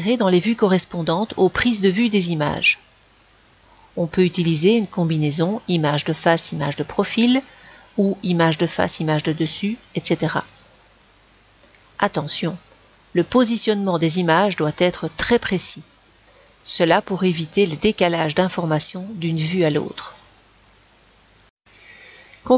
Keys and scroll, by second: 22.2 Delete.